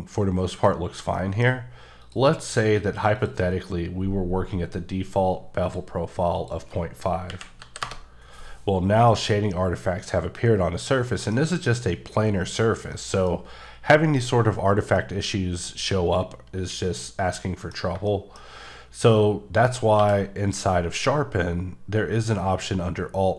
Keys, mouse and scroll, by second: 1.2 middle click, 1.3 scroll, 1.4 scroll down 1, 1.5 scroll up 3, 2.0 click, 3.1 click, 5.7 click, 6.4 click, 7.3 KP_Decimal, 7.6 KP_5, 7.8 KP_Enter, 8.5 scroll down 3, 9.1 shift+middle click, 9.4 scroll up 2, 11.1 middle click, 12.9 scroll down 2, 15.0 middle click, 18.4 scroll up 1, 20.0 q.